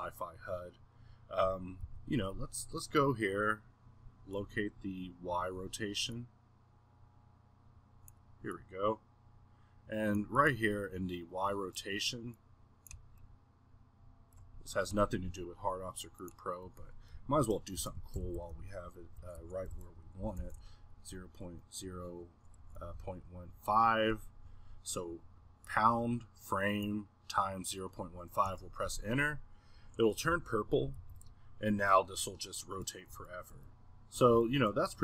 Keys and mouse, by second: 1.8 n, 7.5-14.3 drag, 14.3-16.2 middle drag, 16.2-30.2 drag, 32.0-35.0 middle drag.